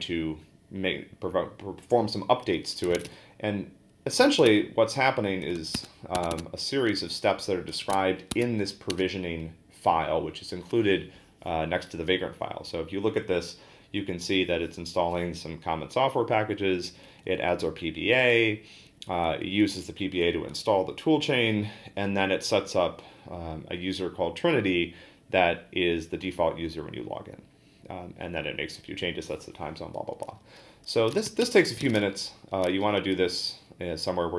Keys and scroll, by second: 3.0-6.1 typing, 6.2 Tab, 6.3 Tab, 7.4-8.4 typing, 8.9 Return, 16.9 Down, 17.0 Down, 17.3 Down, 17.5 Down, 18.2 Down, 31.4 Return, 31.6-32.4 typing.